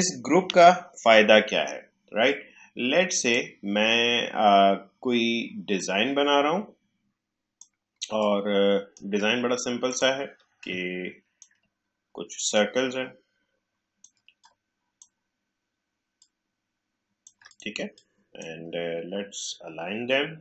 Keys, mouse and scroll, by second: 0.4 Delete, 2.2-5.7 drag, 5.7-8.1 drag, 8.1-20.4 shift+drag.